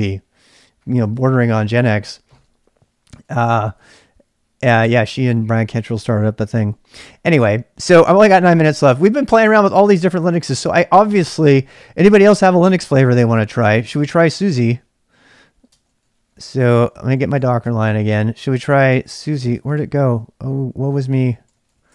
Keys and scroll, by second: 3.0-4.8 typing, 4.7 Return, 12.2 ctrl+[, 12.3 k, 12.9 k, 13.6 k, 14.2 ctrl+c, 15.6-19.7 typing, 20.7 ctrl+c, 20.9-21.9 typing.